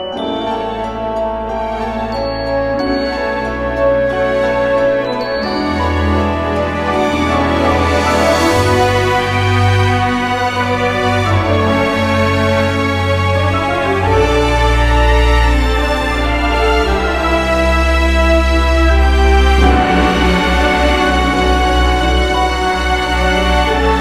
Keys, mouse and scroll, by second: 0.7 click, 0.8-2.4 typing, 1.0 Tab, 2.0 Tab, 3.7-11.5 typing, 15.0 Escape, 15.2-19.8 typing, 20.9-23.9 typing.